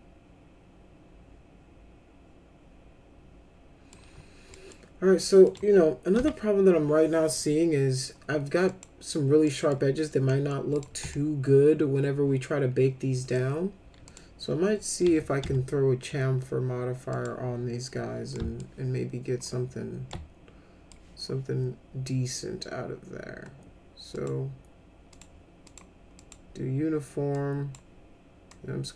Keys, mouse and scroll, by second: 4.5 middle click, 5.5 click, 6.2 F4, 8.7 click, 9.4 middle drag, 10.3 middle drag, 10.8 click, 11.1-13.3 alt+middle drag, 14.1 click, 15.1 c, 15.4 c, 17.1 click, 18.4 alt+middle click, 20.1 alt+middle click, 24.2 click, 25.1 click, 25.7 click, 26.2 click, 27.4 click, 28.5-28.9 drag.